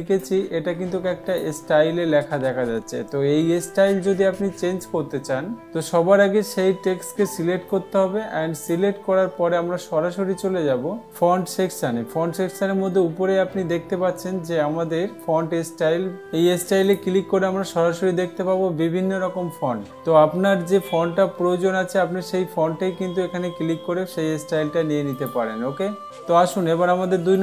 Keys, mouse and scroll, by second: 1.9-2.9 drag, 8.3-9.3 drag, 17.4-18.4 drag, 25.7 click.